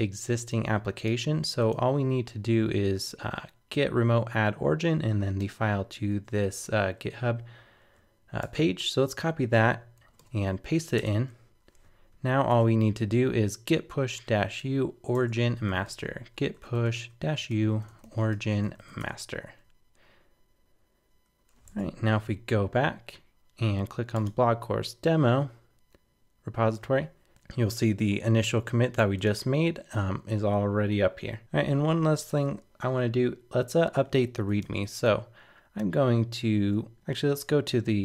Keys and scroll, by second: 5.9 super+c, 8.4 super+Tab, 10.0 super+k, 10.2 super+v, 12.5 super+Tab.